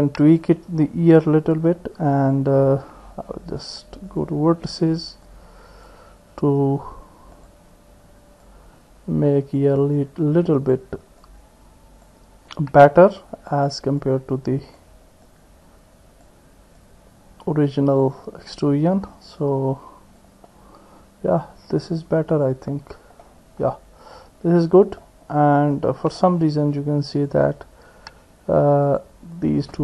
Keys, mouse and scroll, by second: 2.2 click, 4.1 click, 5.2 click, 7.4 click, 8.5-9.6 drag, 10.1 click, 11.3 click, 12.6-13.6 drag, 14.0 click, 15.2-16.3 drag, 16.8-18.1 drag, 19.4 click, 22.3 click, 23.2-24.6 drag, 24.6 middle click, 25.8 click, 26.2 middle click, 27.1 click.